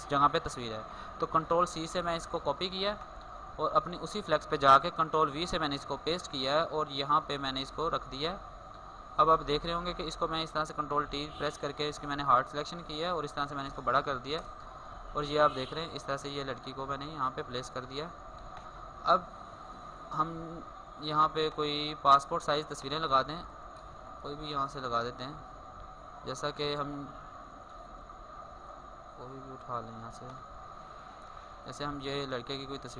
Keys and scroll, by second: 1.2 ctrl+c, 3.6 ctrl+c, 4.6 ctrl+v, 5.6 ctrl+t, 14.9 ctrl+space, 19.7 ctrl+alt+w.